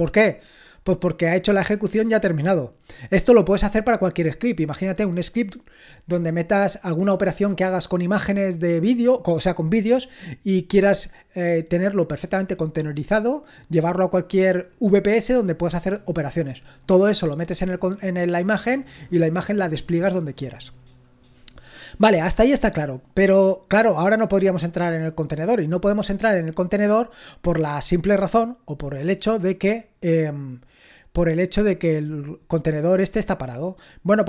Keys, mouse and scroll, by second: 34.1-34.2 typing.